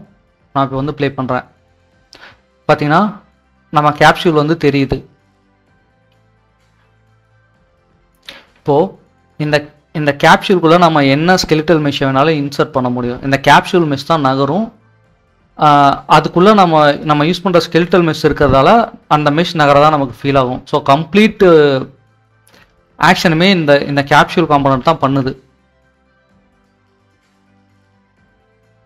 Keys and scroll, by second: 2.6-2.9 typing, 5.9 Escape, 6.1 typing.